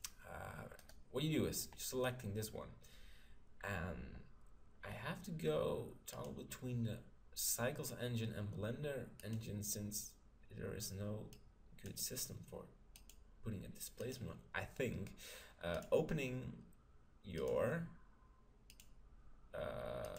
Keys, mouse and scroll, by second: 0.8-2.6 right drag, 6.1-7.9 drag, 11.3-15.7 drag, 15.9-19.2 drag, 20.1 click.